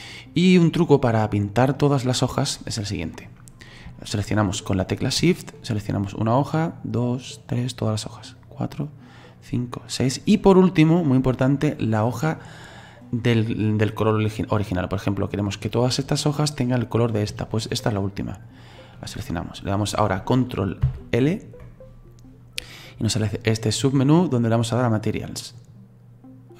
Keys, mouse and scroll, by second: 0.0 right click, 0.5-5.8 middle drag, 5.8 shift+right click, 6.7 shift+right click, 7.4 shift+right click, 8.4 shift+right click, 9.3 shift+right click, 10.0 shift+right click, 18.5 shift+right click.